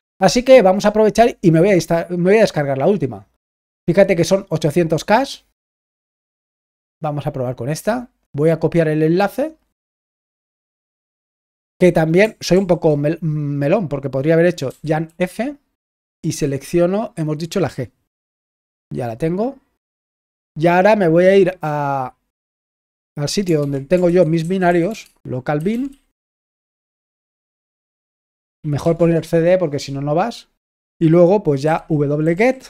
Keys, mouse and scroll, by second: 7.0 right click, 9.1 click, 10.2 click, 10.9-21.3 drag.